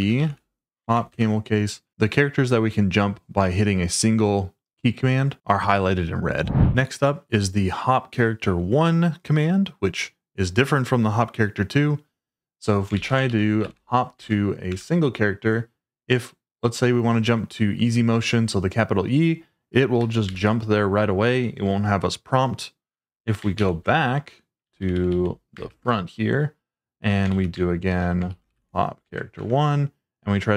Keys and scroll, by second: 0.0-1.6 typing, 12.9-14.2 typing, 14.2 Tab, 14.7 Return, 20.2 shift+e, 23.5 ctrl+o, 24.6-25.7 typing, 27.3-29.0 typing, 29.1 Tab, 29.3 Return.